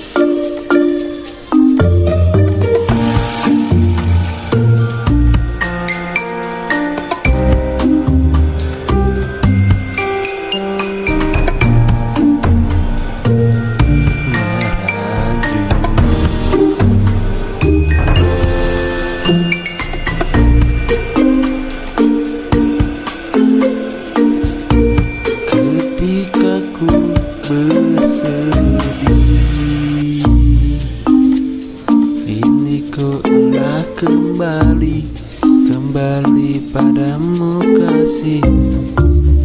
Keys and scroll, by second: 4.0 typing, 5.1 z, 7.8-8.6 typing, 9.8 v, 12.8-14.0 typing, 23.3 v.